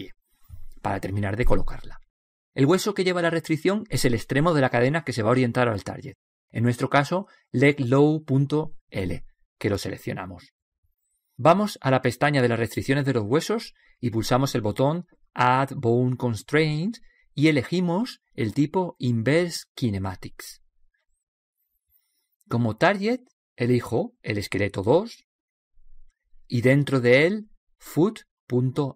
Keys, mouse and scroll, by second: 7.3-9.0 middle drag, 11.2-13.1 drag, 14.0-15.8 drag, 22.9-24.6 drag, 28.2 o.